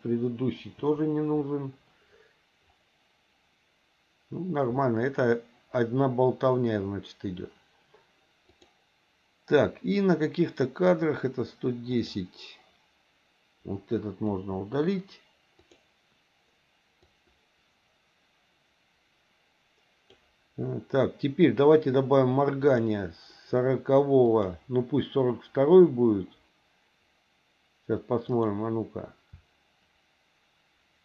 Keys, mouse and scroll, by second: 0.8 Delete, 8.6 click, 11.9 click, 14.3 Delete, 15.6 click, 17.1-20.2 drag, 22.7 click, 24.3 click, 28.3 click.